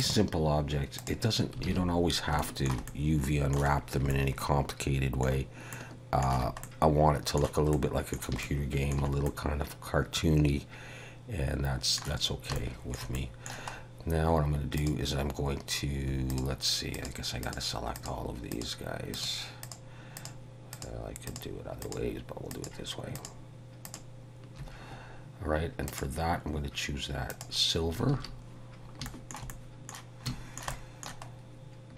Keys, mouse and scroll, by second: 0.0 click, 2.0 alt+a, 2.4 scroll down 1, 2.5 shift+middle click, 2.9 middle click, 3.8-4.1 scroll down 3, 4.1 shift+middle click, 5.9 shift+middle click, 6.7 middle click, 7.7 middle click, 8.5 shift+middle click, 9.3 middle click, 12.6 shift+middle click, 13.8-14.1 scroll up 2, 14.8 click, 16.3 shift+click, 17.0 click, 17.5 click, 18.1 shift+click, 18.6 shift+click, 19.2 shift+click, 19.7 shift+click, 20.2 shift+click, 20.8 shift+click, 21.3 shift+click, 21.9 shift+click, 22.7 shift+click, 23.2 shift+click, 23.9 shift+click, 25.9 click, 28.2 alt+a, 28.7 scroll down 2, 29.1 shift+middle click, 29.5 middle click, 30.3 shift+middle click, 30.8 middle click, 31.3-31.8 scroll up 2.